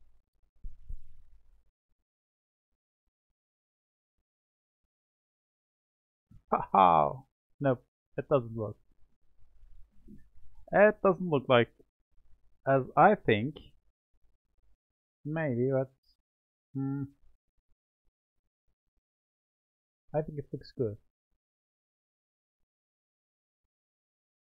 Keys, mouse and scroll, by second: 19.2-23.6 middle drag.